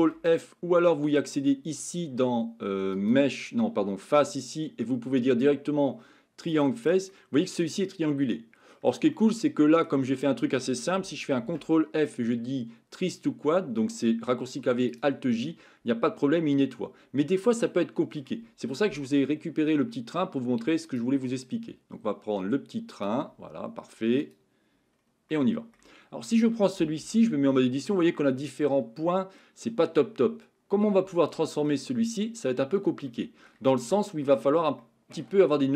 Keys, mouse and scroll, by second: 0.3 ctrl+p, 3.1-6.7 drag, 7.1-8.8 middle drag, 9.1 middle click, 15.5-18.2 middle drag, 20.9-24.4 drag, 25.3 middle click, 27.5 shift+middle click, 27.9 Tab, 28.1-30.9 middle drag, 31.2 shift+middle click, 32.0 middle click, 33.1 shift+middle click, 33.8 middle click, 34.8 shift+middle click.